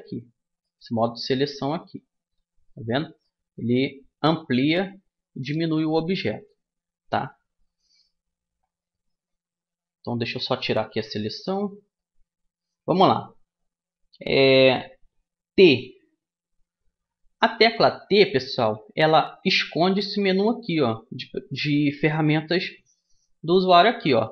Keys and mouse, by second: 0.2-1.4 middle drag, 0.7 s, 3.2 s, 9.3 s, 10.6 a, 11.2-13.2 middle drag, 18.2 t, 19.8 t.